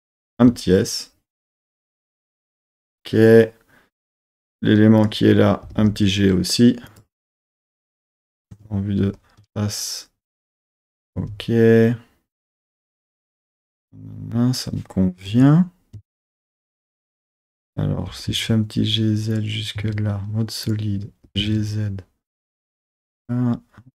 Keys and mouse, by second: 0.4 s, 2.1 click, 4.0 1, 5.0 click, 5.6 g, 5.8 g, 6.9 click, 8.5 KP_3, 9.0 z, 11.2 z, 13.6 middle click, 14.4 middle click, 15.3 KP_1, 16.0 KP_3, 16.6 z, 17.4 click, 18.1 g, 18.3 z, 19.3 click, 19.8 z, 20.6 click, 21.2 g, 21.4 z, 22.6 click.